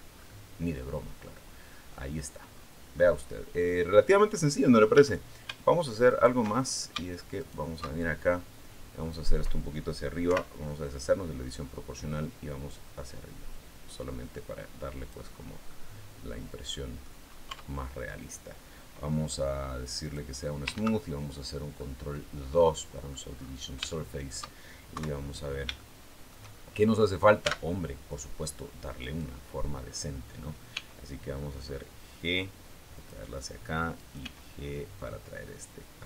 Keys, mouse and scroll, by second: 0.0-0.4 scroll up 2, 0.7-1.9 middle drag, 2.3 scroll down 2, 2.8-4.1 middle drag, 4.8 a, 5.9 alt+shift+right click, 6.3-6.6 alt+shift+scroll up 2, 7.2 alt+shift+right click, 7.8-8.2 alt+shift+scroll down 3, 8.2 middle click, 10.0 o, 11.8-15.1 drag, 15.2 scroll down 1, 15.4-17.0 middle drag, 17.0-17.4 scroll up 1, 17.3 Tab, 19.8 click, 20.6 ctrl+2, 21.2-21.6 scroll down 2, 21.6-23.1 middle drag, 23.1-23.7 scroll up 2, 23.7 shift+middle click, 24.8 KP_3, 25.6 shift+middle click, 26.3-26.8 shift+scroll up 3, 26.8 right click, 27.2 Tab, 28.8 right click, 30.5 g, 32.8 click, 33.8 right click, 34.0 g, 35.9 click.